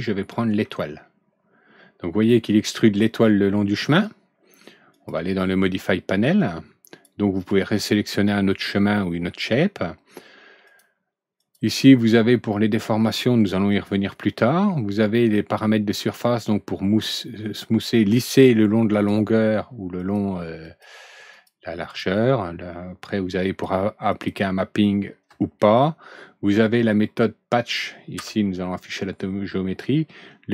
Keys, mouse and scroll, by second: 0.6 alt+Right, 0.7-3.7 middle drag, 4.9 click, 6.3-7.0 drag, 10.6 click, 11.3 click, 13.6 click, 16.2 click, 18.9 click, 19.9 click, 20.6 click, 21.3 click, 21.8 click, 23.4 click, 24.0 click, 28.1 F4.